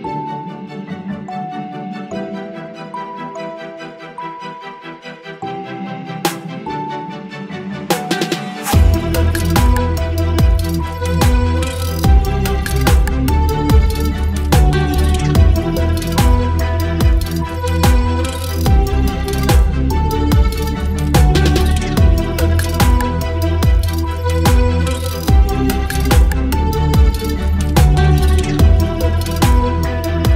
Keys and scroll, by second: 0.1 v, 0.2 ctrl+t, 2.5 Left, 3.5 Return, 4.2 l, 5.1 Delete, 6.2 Delete, 7.9 Delete, 8.2 ctrl+z, 8.8 Delete, 9.2 space, 9.3 v, 9.7 ctrl+t, 10.3 ctrl+d, 10.4 ctrl+v, 11.3 ctrl+t, 13.6 Return, 15.4 ctrl+e, 17.1 ctrl+e, 18.5 space, 20.8 Left, 20.8 Left, 21.8 Left, 21.8 Left, 21.9 Left, 23.1 ctrl+t, 23.8 ctrl+shift+t, 26.9 Return, 27.3 ctrl+t, 29.5 Return.